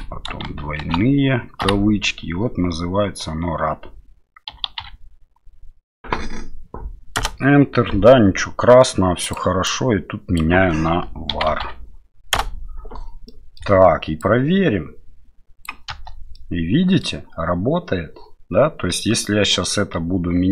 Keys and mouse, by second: 0.8 shift+", 9.3-13.0 drag, 13.2 middle click, 14.2-15.6 drag, 15.9 space, 16.3 middle click, 19.5-20.5 drag.